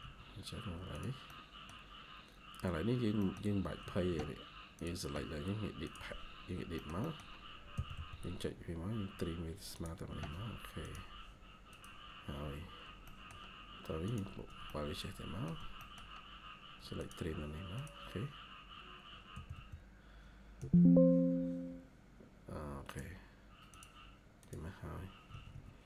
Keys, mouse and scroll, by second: 1.2 middle click, 1.8 scroll up 1, 3.1 middle click, 3.7 Escape, 4.0 Escape, 6.7 middle click, 7.6-8.2 typing, 8.0 scroll up 1, 11.0 scroll down 1, 12.9 middle click, 15.4 shift+scroll down 1, 15.7 middle click, 18.2 scroll up 1, 19.2 typing, 20.5 Tab, 20.7 typing, 25.2 Escape, 25.4 Escape, 25.5-25.8 scroll down 4.